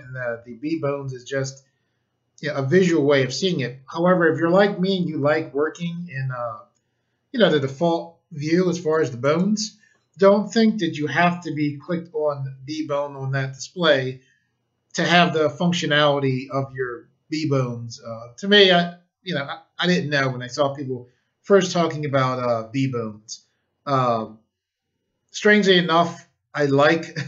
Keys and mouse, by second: 9.2 right click, 26.5 click.